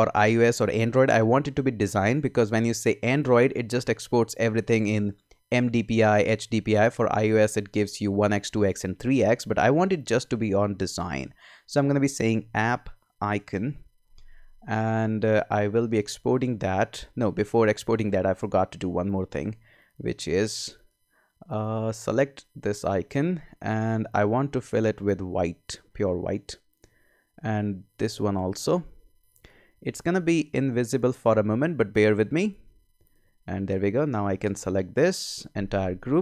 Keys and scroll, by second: 12.0-13.8 typing.